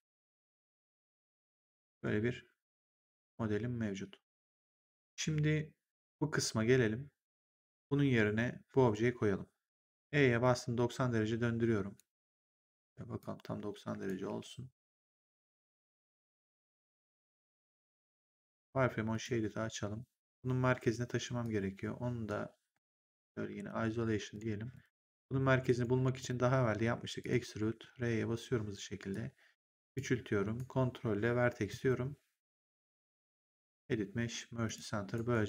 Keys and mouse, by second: 0.4 click, 5.9 click, 9.9 e, 10.3 click, 13.1 click, 14.2 w, 15.0 click, 19.0 click, 21.3 click, 22.9 shift+click, 23.5 ctrl+1, 24.2 click, 25.1 1, 25.6 right click, 26.1 click, 27.6 r, 29.0 click, 30.5 ctrl+right click, 33.0 click, 34.6 click, 35.0 right click.